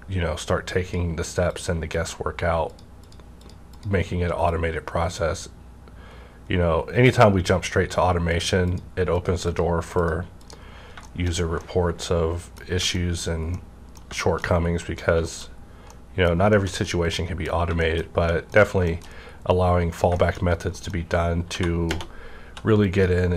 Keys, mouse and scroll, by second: 1.9 click, 2.7-8.7 drag, 10.8 scroll down 1, 11.0 shift+middle click, 11.6-14.5 shift+middle drag, 14.5 scroll down 1, 14.8 middle click, 15.4-15.9 shift+scroll up 2, 15.9 middle click, 16.5-18.3 shift+middle drag, 18.6 scroll down 1, 18.9 shift+middle click, 20.2 shift+middle click, 20.4 shift+scroll up 2, 20.7 middle click, 21.5 2, 21.9 -, 22.2 scroll up 1, 22.4 2, 22.9 click.